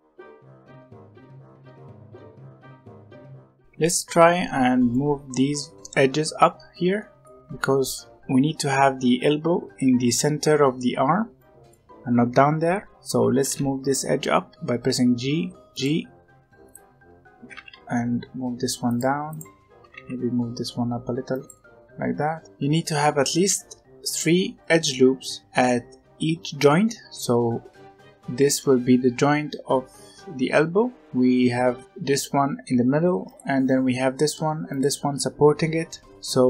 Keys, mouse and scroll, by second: 0.0-1.7 typing, 0.5 middle click, 1.8 middle click, 2.3 Tab, 2.5 Tab, 2.6 alt+a, 2.8 scroll down 2, 2.8 middle click, 3.1 click, 3.3 scroll up 1, 3.4 Tab, 3.5-10.5 middle drag, 11.3-13.3 middle drag, 13.3 g, 16.6 alt+click, 17.3 g, 19.2 alt+click, 19.7 g, 21.5-23.3 middle drag, 23.3 alt+a, 24.0 alt+click, 24.6 alt+click, 30.9 alt+click, 33.2 alt+click, 34.6 alt+shift+click, 36.1-36.4 middle drag.